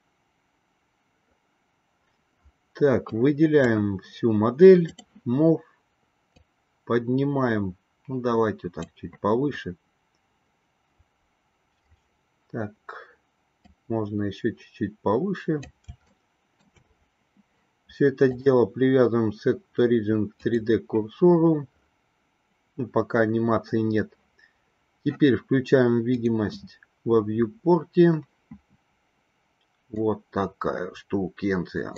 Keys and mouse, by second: 3.2-4.0 drag, 5.1 click, 6.6-9.1 drag, 13.8-16.0 drag, 16.4-17.0 shift+middle drag, 18.4-20.8 drag, 27.5-28.7 drag, 30.2-31.9 middle drag.